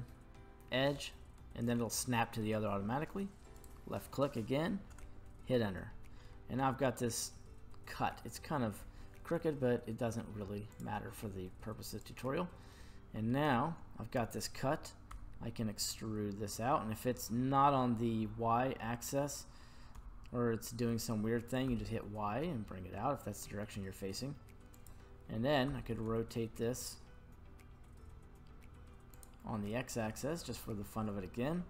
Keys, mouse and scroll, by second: 6.2 middle click, 10.7 click, 11.9 right click, 12.7 middle click, 13.8 scroll down 1, 15.2 e, 20.0 y, 20.0 x, 21.6 y, 24.8 click, 25.7 r, 26.0 x, 29.1 click, 29.6-30.9 middle drag.